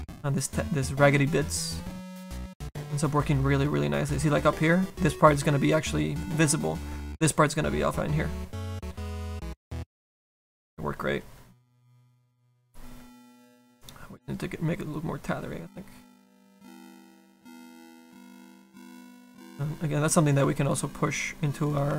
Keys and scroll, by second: 16.6 s.